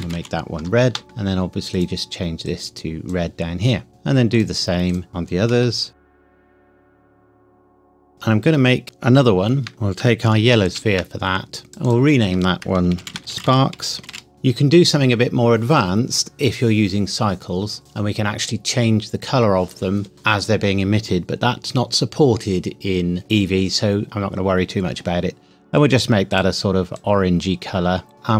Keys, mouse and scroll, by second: 0.9 KP_Enter, 1.7 click, 5.5 BackSpace, 6.3 click, 6.5 click, 6.8 click, 7.3 BackSpace, 7.5 e, 7.6 Return, 7.8 click, 8.3-8.8 scroll down 1, 9.9 Escape, 10.6 shift+d, 11.7 click, 13.0-14.1 typing, 14.3 Return, 26.3 click.